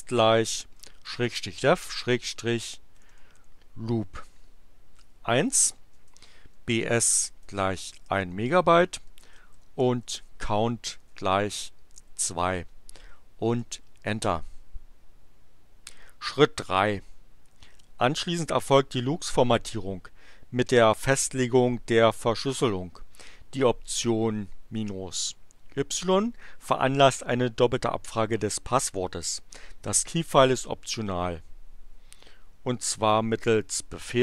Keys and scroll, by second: 0.8-3.8 typing, 5.3-11.6 typing, 13.4 Return.